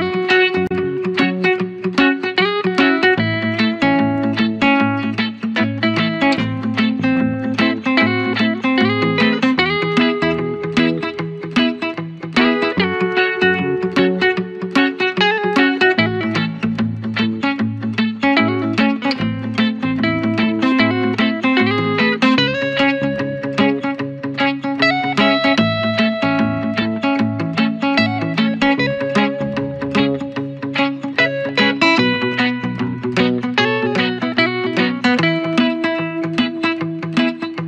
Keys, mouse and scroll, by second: 11.2 ctrl+=, 12.8-15.2 drag, 15.2 ctrl+d, 17.7 ctrl+=, 19.2 click, 20.0 scroll up 1, 21.4 click.